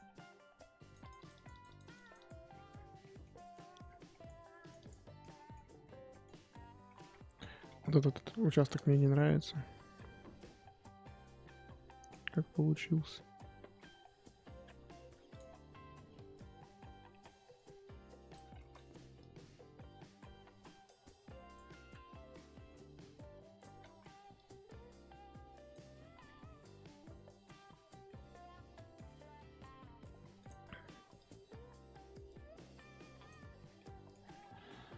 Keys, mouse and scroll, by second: 0.8-2.5 drag, 2.5-3.3 scroll down 11, 3.0 middle click, 3.3-4.1 scroll up 12, 4.1 middle click, 4.6 click, 5.1 scroll down 5, 5.3 middle click, 5.8 scroll up 2, 6.1 middle click, 6.7 scroll down 1, 6.8 middle click, 7.1-7.6 scroll up 3, 7.6 f, 8.8 shift+middle click, 9.5-9.9 scroll up 3, 9.9 scroll down 2, 10.4-14.2 drag, 14.2-15.1 scroll down 3, 15.3 click, 16.1-16.4 scroll up 2, 16.4-17.5 scroll down 2, 17.5-18.6 drag, 18.6 ctrl+z, 19.1-21.8 drag, 21.8-22.3 scroll down 5, 22.3-22.8 scroll up 2, 22.8-23.9 drag, 23.9 ctrl+z, 24.3-26.0 drag, 26.0-26.5 scroll down 11, 26.5-27.5 middle drag, 27.5-28.0 scroll up 4, 28.1 middle click, 29.0 scroll up 4, 30.4 click, 31.2-33.8 drag, 33.8 middle click, 34.1 scroll up 1, 34.3 scroll down 5, 34.5-34.9 middle drag.